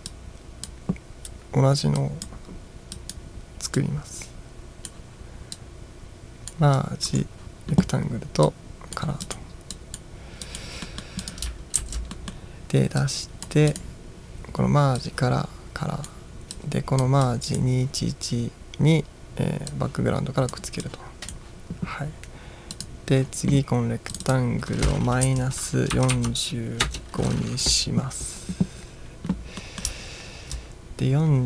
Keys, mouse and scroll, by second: 0.2-0.8 drag, 2.1-2.4 drag, 3.0 drag, 3.9-5.1 drag, 5.6-6.7 drag, 7.1 right click, 8.5 click, 9.3 click, 9.8-10.1 drag, 10.5 drag, 10.9 middle drag, 11.3 click, 11.9 ctrl+v, 12.2 middle drag, 13.1-13.7 drag, 13.8 click, 15.0-16.3 drag, 16.6-17.1 drag, 17.3-17.6 drag, 19.8 click, 20.9 click, 22.8 click, 24.2 click, 25.3-26.7 typing, 26.9 Return, 29.6 middle click, 30.2 ctrl+scroll down 1.